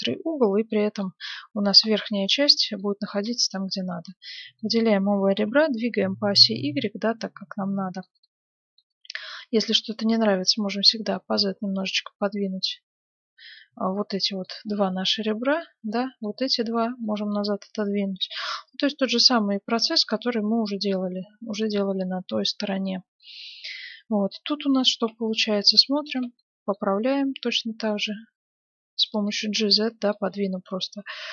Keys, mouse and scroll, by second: 0.7-2.4 right drag, 1.0-5.8 middle drag, 3.4-5.2 right drag, 5.2 g, 8.2-9.9 middle drag, 9.3-11.0 right drag, 9.9-13.1 drag, 14.6-18.9 middle drag, 15.5-18.4 right drag, 18.2 g, 19.9-28.3 middle drag, 25.0 ctrl+Tab, 25.5-28.0 right drag, 26.9 g, 29.3-31.1 middle drag, 30.2 g.